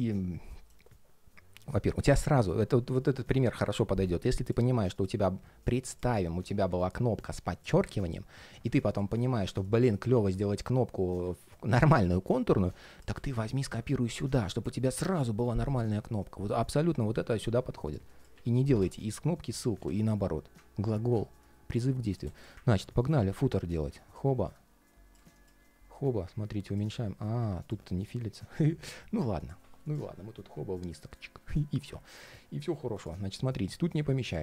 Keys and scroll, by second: 22.7 alt+i.